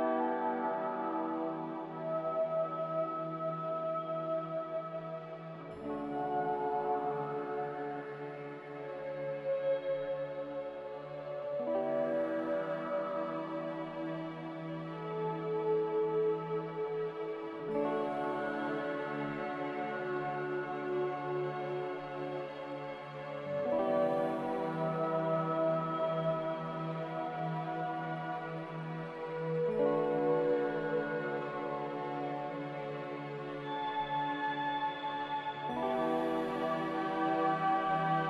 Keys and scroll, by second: 5.8 g, 17.4 c, 24.1-25.4 typing, 28.1 z, 31.9 a, 32.8 ctrl+z, 37.3 z.